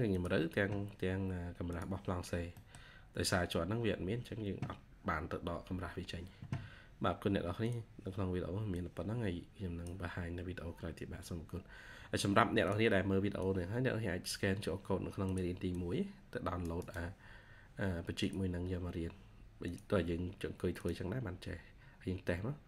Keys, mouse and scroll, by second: 2.4 middle click, 6.0-6.3 scroll down 1, 15.6 double click, 16.6 right click, 21.0 scroll up 1.